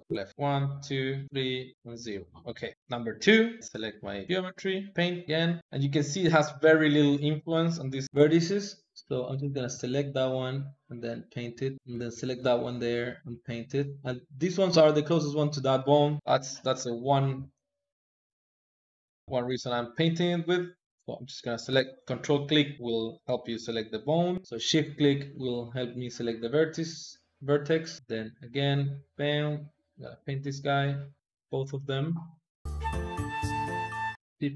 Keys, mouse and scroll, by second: 0.3 click, 0.9 click, 1.2 click, 2.5 click, 3.6 shift+click, 4.9 ctrl+Tab, 8.0 Escape, 8.2 shift+click, 8.7 shift+click, 9.7 shift+click, 10.7-12.2 drag, 12.8-15.8 drag, 17.0 shift+click, 17.9-19.3 drag, 19.3 ctrl+z, 21.0 ctrl+click, 24.3 shift+click, 25.6 shift+click, 27.0-28.0 drag, 28.6-32.6 drag, 34.2 shift+click.